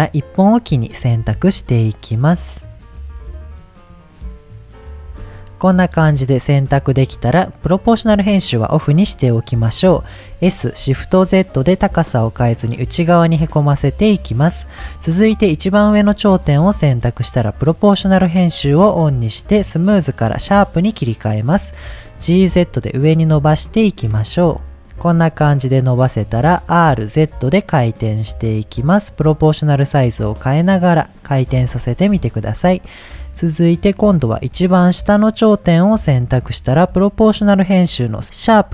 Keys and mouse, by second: 5.9 middle click, 7.6 click, 9.3 middle click, 10.3 s, 11.0 shift+z, 14.0 click, 16.9 click, 17.9-21.5 drag, 22.2 g, 22.5 z, 24.8 click, 25.6 middle click, 26.6 r, 27.0 z, 31.2 click, 32.2 middle click, 33.8 click, 34.1 middle click, 35.5 click, 37.3-38.2 drag, 38.4-38.7 drag.